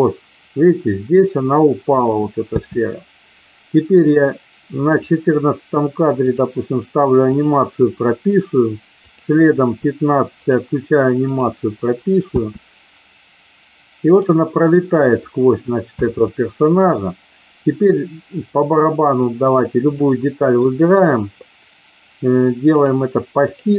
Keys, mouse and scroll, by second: 2.5 space, 4.9 click, 6.1 click, 7.2 click, 9.0 click, 10.4 click, 11.3 click, 12.2 space, 15.9 space, 16.8 click, 19.9 click, 22.9 click.